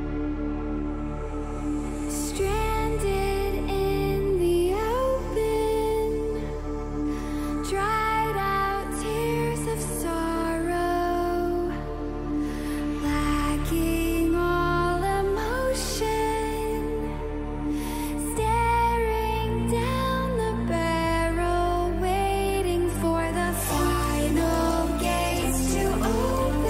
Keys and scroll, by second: 6.8 ctrl+=, 6.8 ctrl+[.